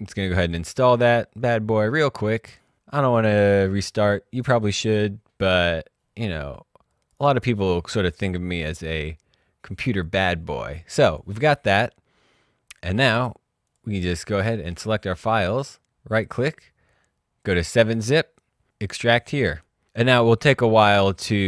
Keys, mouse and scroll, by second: 9.9 click, 13.7 click, 14.8 right click, 17.4 click, 18.8 click.